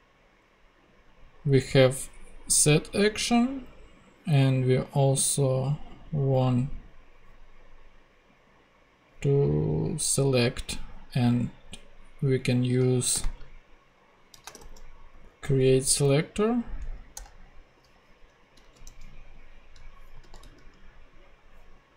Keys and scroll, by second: 13.1 ,, 13.3 space, 14.3-15.7 typing, 16.8 Down, 17.1 Return, 18.6 super+c, 18.8 super+Tab, 20.2 super+f, 20.4 super+v.